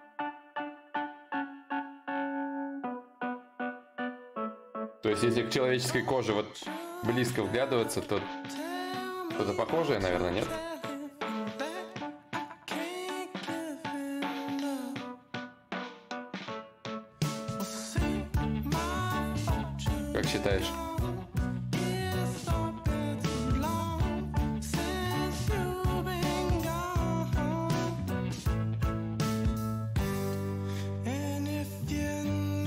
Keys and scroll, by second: 2.2 ctrl+z, 10.0 ctrl+z, 20.7 w, 21.4 ctrl+z, 24.2 ctrl+z.